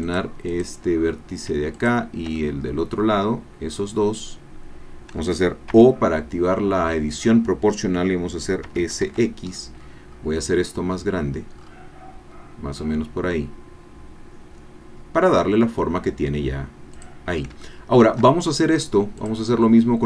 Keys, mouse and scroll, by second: 0.5 click, 1.7 shift+click, 2.4-5.3 shift+drag, 5.7 o, 8.6 s, 9.0 x, 9.7-10.3 scroll down 2, 10.3-11.2 scroll down 2, 11.6-11.9 scroll up 2, 12.3 scroll down 2, 17.0 click, 17.6-18.7 shift+drag.